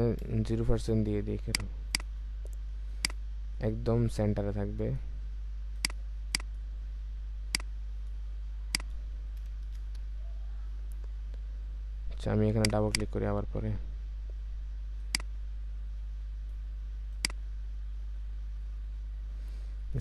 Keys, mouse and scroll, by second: 0.2 typing, 1.9 double click, 9.4 typing, 9.6 Return, 12.8 double click.